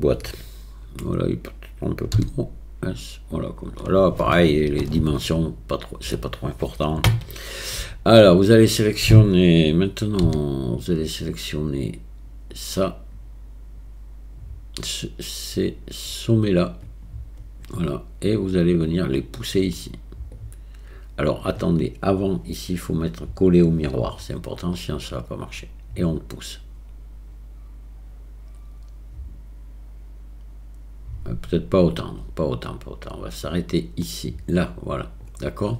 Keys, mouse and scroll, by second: 2.2 s, 7.8 a, 10.2 c, 20.4-21.5 drag, 23.7 click, 25.5-35.7 drag.